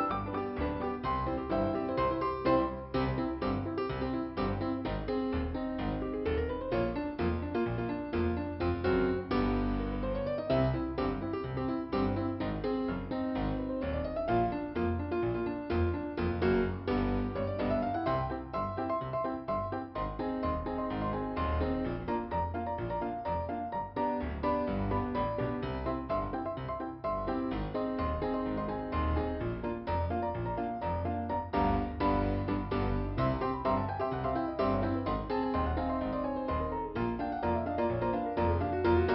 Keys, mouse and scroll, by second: 0.9 click, 5.4 click, 6.5 click, 12.6-13.4 scroll up 1, 14.0 click, 15.0 click, 15.7 click, 17.3 click, 17.4 click, 19.7 click, 20.5 click, 22.1 f, 22.9 scroll up 2, 25.1 click, 29.2 click, 29.6 click, 30.1 double click, 32.7 scroll down 2, 33.4 click, 34.4 scroll up 1, 36.0 click, 36.5 click, 38.9 click.